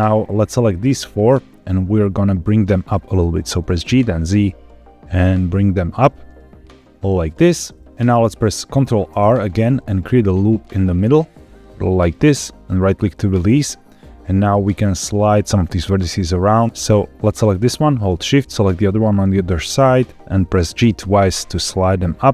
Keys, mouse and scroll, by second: 0.1 click, 2.3-3.3 middle drag, 3.7 g, 4.1 z, 7.1 click, 7.9 middle click, 9.0 ctrl+r, 12.7 right click, 13.4-14.4 middle drag, 14.7-15.7 scroll up 2, 16.7 Escape, 16.7 alt+click, 17.4 click, 18.7 shift+click, 20.7 g, 20.9 g.